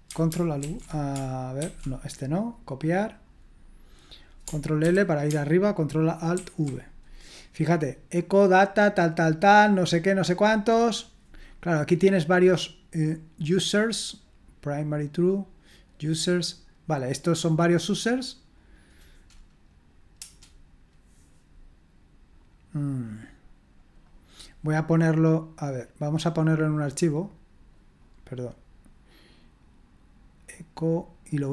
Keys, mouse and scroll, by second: 0.6 ctrl+alt+v, 1.6 ctrl+c, 4.8 ctrl+l, 6.3 ctrl+alt+v, 11.9-20.1 drag, 20.1 Return, 22.3 click, 23.8 click, 26.3-29.1 drag, 30.4-31.5 drag.